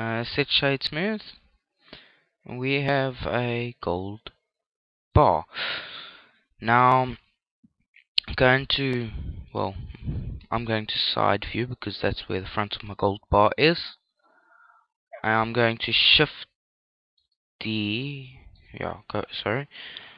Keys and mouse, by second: 0.9 click, 1.4-3.2 middle drag, 5.5-7.4 middle drag, 7.7 KP_3, 9.6 KP_5, 10.7-14.1 middle drag, 17.4-19.9 middle drag, 19.2 KP_3.